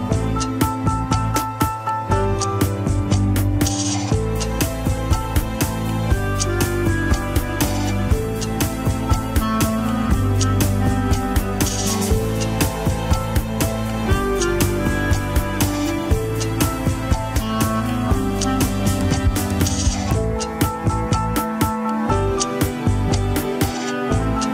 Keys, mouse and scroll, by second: 0.8 ctrl+click, 0.9 alt+z, 1.1-2.8 middle drag, 2.8 ctrl+s, 3.8 click, 4.8-8.4 drag, 9.3 scroll up 2, 9.9 click, 10.6 middle click, 11.2-13.5 drag, 13.5 scroll down 3, 13.6-14.9 middle drag, 14.9 click, 15.2-17.7 middle drag, 18.0-20.5 drag, 20.5-22.0 middle drag, 22.0 scroll up 1, 22.4 shift+middle click, 22.6 scroll up 1, 23.4 ctrl+click, 23.9 ctrl+click.